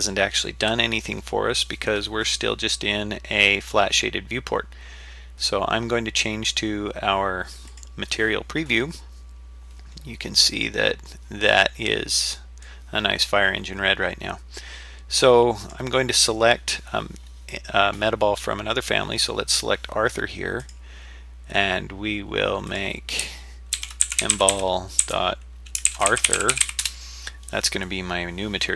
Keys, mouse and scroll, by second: 7.7 click, 9.3-9.9 scroll down 2, 9.9-10.6 scroll up 3, 10.8 scroll down 1, 11.6-12.6 middle drag, 13.2 scroll down 2, 13.7 scroll up 2, 15.6 click, 20.6 click, 22.7-27.3 drag, 24.5 l.